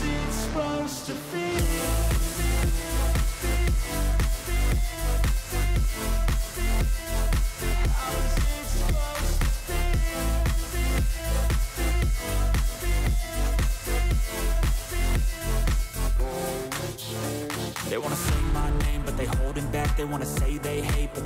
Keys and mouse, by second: 0.4 click, 2.5 click, 4.4 click, 6.5 click, 8.6 shift+click, 8.8 shift+click, 9.4 shift+click, 9.8 click, 10.3 click, 12.5 click, 15.1 click, 16.0 click, 16.8 alt+click, 17.7 alt+shift+click, 18.1 alt+shift+click, 19.7 click.